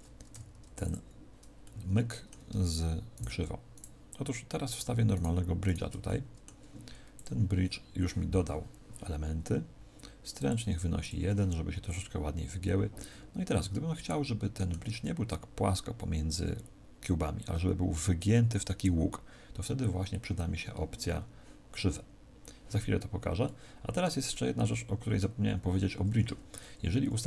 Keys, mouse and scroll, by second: 0.2 w, 1.6 middle click, 3.1 shift+right click, 3.6 shift+right click, 6.0 middle click, 7.1 click, 10.3 click, 13.6 middle click, 23.4 middle click, 24.2 middle click.